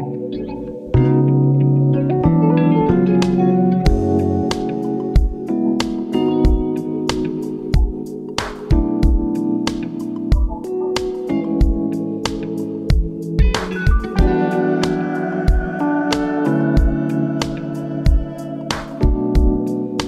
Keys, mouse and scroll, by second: 1.6-2.6 drag, 2.6-4.9 middle drag, 8.3 click, 8.9-12.1 drag, 12.7 click, 14.0 click, 15.0 click, 16.2-16.9 middle drag, 16.9-17.4 scroll up 1, 17.4-18.3 middle drag, 18.3-18.8 scroll up 1, 18.8-19.8 scroll down 3, 19.8-20.0 middle drag.